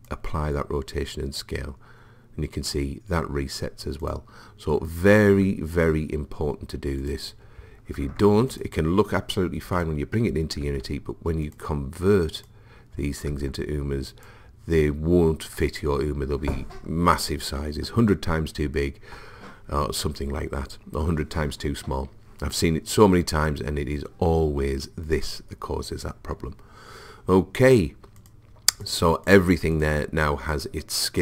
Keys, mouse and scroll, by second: 4.1 click, 5.2 ctrl+a, 7.1 click, 8.0 ctrl+a, 9.8-10.8 drag, 10.7 ctrl+a, 11.7 right click, 13.3 ctrl+a, 15.9 right click, 27.7-31.2 drag.